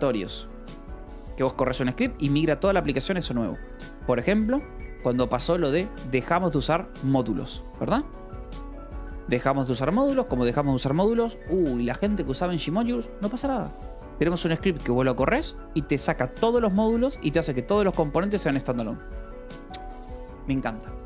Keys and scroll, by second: 0.0-1.1 typing.